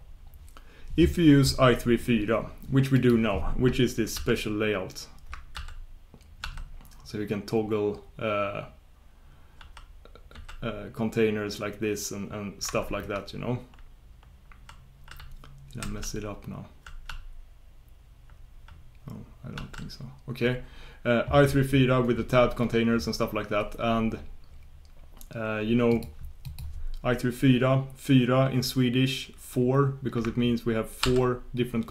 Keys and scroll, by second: 4.1 super+j, 5.5 shift+super+j, 6.4 shift+super+k, 10.3 shift+super+j, 14.3 ctrl+super+k, 15.1 ctrl+super+j, 16.0 ctrl+super+k, 16.6-17.0 ctrl+super+k, 17.9 ctrl+super+k, 18.1 ctrl+super+k, 18.2 ctrl+super+k, 18.7 ctrl+super+k, 28.7 ctrl+super+k, 31.0 shift+super+l, 31.3 shift+super+l.